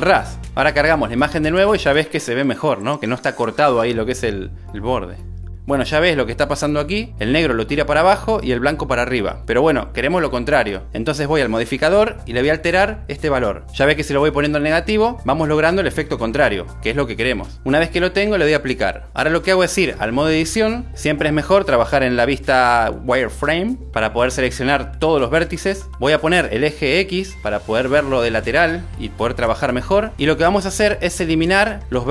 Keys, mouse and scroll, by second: 2.0 click, 12.2 click, 13.3 click, 13.5 click, 14.3 click, 14.5 click, 16.9 click, 18.1 super+s, 19.3-20.4 drag, 21.8 click, 27.3 a, 30.4-31.1 drag.